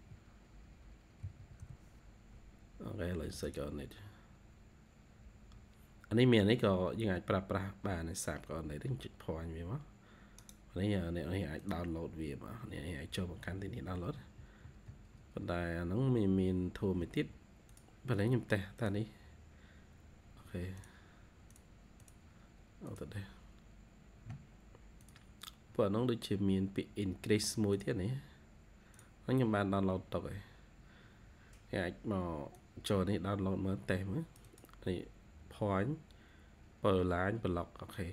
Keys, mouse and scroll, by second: 1.1-1.5 typing, 6.5 scroll down 1, 6.9 typing, 8.2 scroll down 2, 8.5-9.5 typing, 9.1 scroll down 1, 10.3 right click, 12.1-16.6 scroll down 70, 16.9-18.6 scroll up 47, 21.9 double click, 25.6-27.6 scroll up 100.